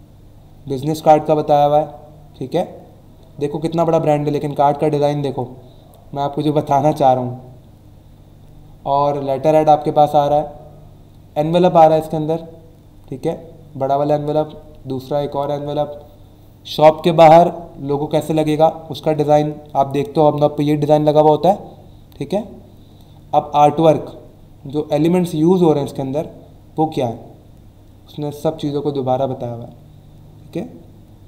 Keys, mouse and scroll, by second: 2.5 scroll down 1, 3.1 scroll up 1, 7.7-8.2 scroll down 2, 9.8-10.4 scroll down 2, 12.9-13.5 scroll down 2, 14.7-15.3 scroll down 2, 15.7 scroll down 1, 21.8-22.4 scroll down 2, 24.5 scroll down 1.